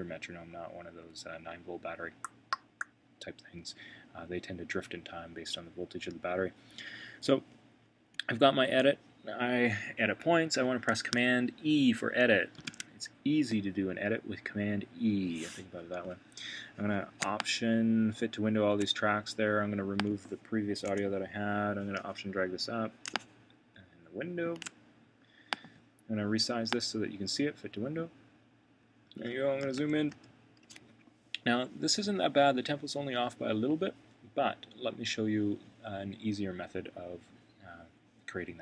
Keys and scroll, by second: 12.6 super+e, 29.7 super+].